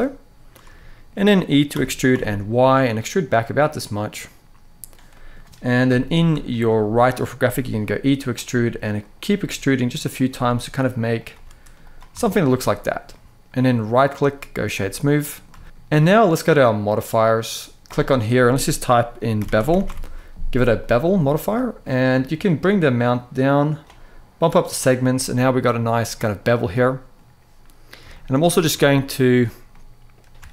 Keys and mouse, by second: 0.6 shift+middle click, 1.8 e, 1.8 y, 2.9 click, 3.3 middle click, 4.8 middle click, 5.6 KP_3, 6.2 shift+middle click, 7.3 e, 8.2 e, 8.7 click, 9.0 e, 9.9 click, 10.0 e, 11.0 e, 11.5 click, 11.8 Tab, 12.3 middle click, 12.8-13.3 middle drag, 13.7-14.4 right drag, 15.0 middle click, 15.4 shift+middle drag, 16.8-20.6 drag, 21.1 shift+middle click, 22.2-23.5 shift+drag, 24.3 click, 25.0-25.8 middle drag, 26.6 middle click, 27.9 shift+middle drag, 28.3 Tab, 28.6 middle click.